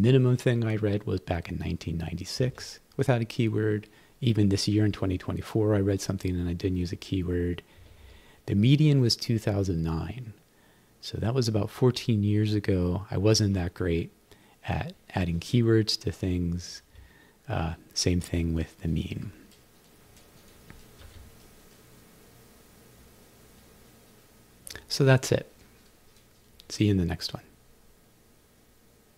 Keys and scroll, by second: 2.4 Right, 7.8 Right, 8.4 Right, 16.8 Right, 21.0 q.